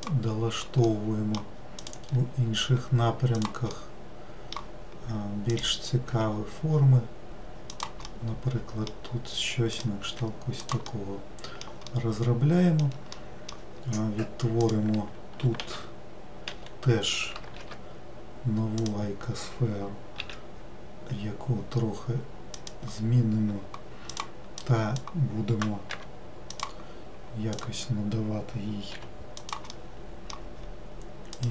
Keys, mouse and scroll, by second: 0.9 middle click, 1.8 click, 2.7 g, 3.8-5.5 middle drag, 5.5 click, 8.1-9.8 middle drag, 9.8 click, 10.1 g, 11.0-14.6 middle drag, 14.6 click, 24.1 click, 24.6-26.0 drag, 26.0 g, 27.6-29.8 drag, 29.8-31.4 middle drag, 31.4 click.